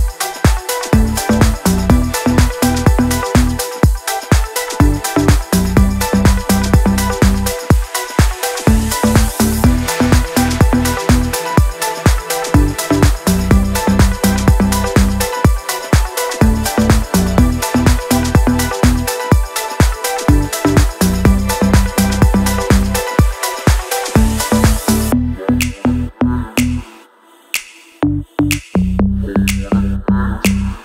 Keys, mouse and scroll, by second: 1.5 click, 2.7 ctrl+c, 3.0 click, 3.9 alt+click, 5.6 ctrl+v, 7.5-21.5 drag, 25.8 Down, 27.0 click, 27.3-28.3 scroll down 1, 28.3 scroll up 1, 29.1 click, 30.5 scroll up 1.